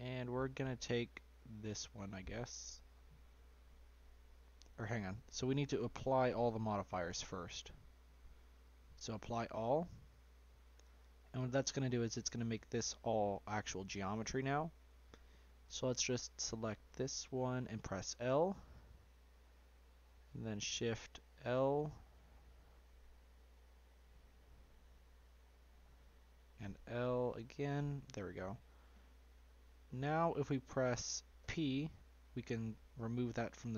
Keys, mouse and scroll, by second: 0.5 shift+middle click, 0.9 scroll down 1, 1.1 middle click, 1.4 scroll up 1, 1.5-5.2 shift+middle drag, 5.2 Tab, 7.2 click, 7.6 click, 8.6-10.4 drag, 10.4-10.8 scroll down 2, 11.1-11.6 shift+middle drag, 11.6-13.9 scroll up 3, 13.9 Tab, 14.6 scroll down 1, 15.2 shift+middle click, 15.9-16.8 scroll up 2, 16.8 click, 18.0 l, 19.4-22.5 middle drag, 22.5 shift+l, 23.5 shift+l, 24.9 l, 27.1 l, 28.6-31.3 middle drag, 31.3 p.